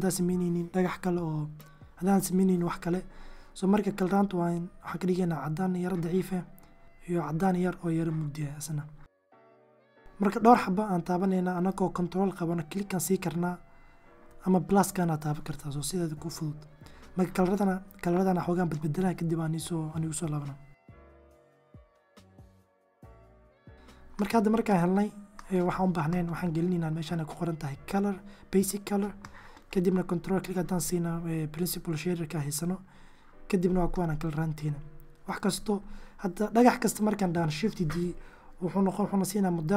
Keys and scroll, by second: 34.7 1, 37.0 shift+d.